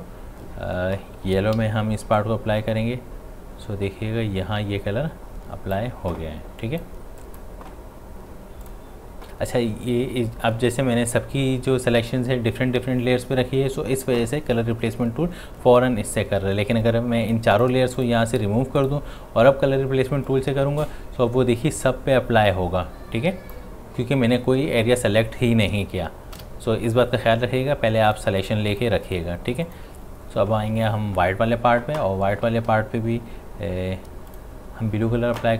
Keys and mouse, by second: 1.6 x, 2.2-6.6 drag, 17.2-25.9 drag, 26.3 click, 26.4 ctrl+z, 28.1 click, 34.3 click.